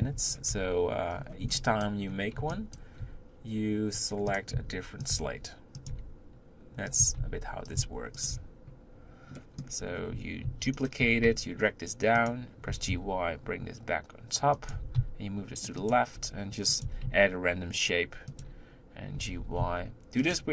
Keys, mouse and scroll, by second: 0.5 Tab, 1.9 b, 2.0-2.8 scroll up 1, 2.8 b, 7.8 s, 8.4 Tab, 9.4 middle click, 9.9-10.5 scroll up 2, 10.5 shift+d, 11.0 g, 12.7 g, 16.2 r, 19.2 g.